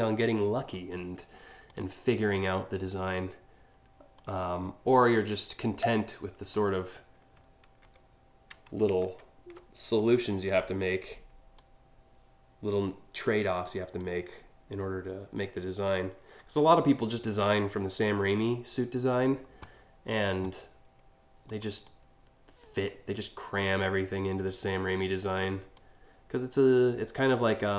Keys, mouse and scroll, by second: 1.3 click, 2.5 click, 4.7-6.2 drag, 7.4 ctrl+z, 8.6 ctrl+alt+z, 9.6 click, 10.1 click, 11.2-12.9 drag, 13.6-16.2 drag, 18.0 click, 21.1 click, 21.4-22.5 drag, 23.4-24.5 drag, 24.8 click, 25.4-27.3 drag.